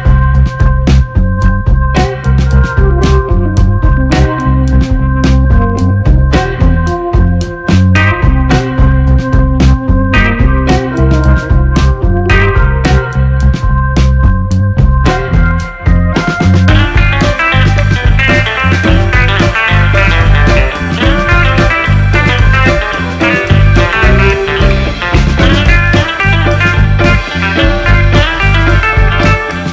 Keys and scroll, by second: 1.7 1, 1.9 Return, 1.9 2, 17.5-22.5 typing, 25.2 1, 25.4 Return, 25.4 2.